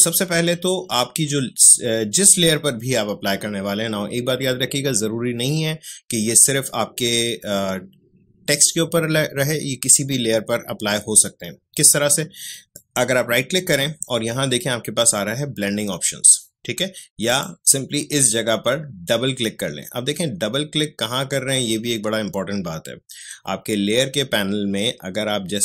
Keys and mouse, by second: 12.5 right click, 17.2 click.